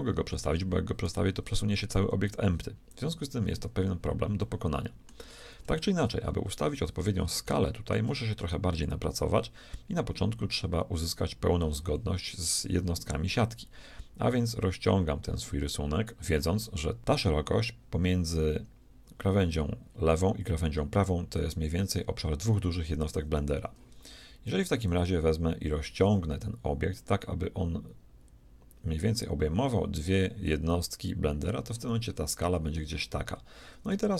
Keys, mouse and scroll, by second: 1.1 g, 4.5-9.4 middle drag, 9.6-11.8 middle drag, 12.6-14.6 drag, 24.9-26.9 drag, 33.3 middle click.